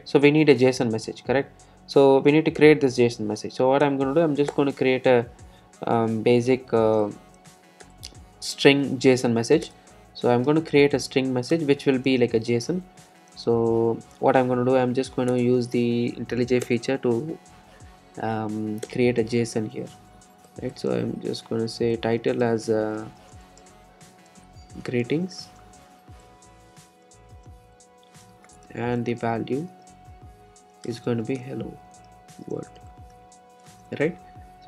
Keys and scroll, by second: 2.1 alt+Return, 7.5 Return, 14.9 alt+Return, 25.0 shift+Return.